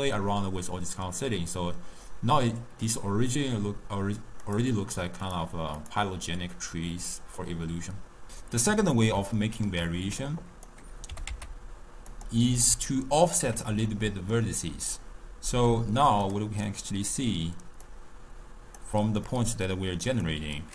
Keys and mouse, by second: 0.1 click, 4.5 click, 5.9 click, 6.6-8.3 middle drag, 8.3 n, 8.9-10.2 middle drag, 10.2 click, 11.1 g, 12.9-15.0 ctrl+middle drag, 15.0-16.4 drag, 16.7 click, 17.9 drag, 19.3-20.1 middle drag, 20.1 click.